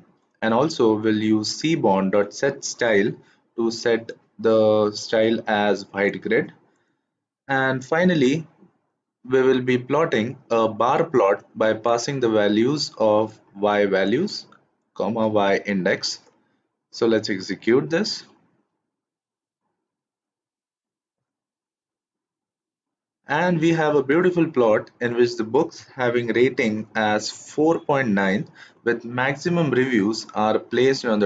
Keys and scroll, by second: 17.4 shift+Return.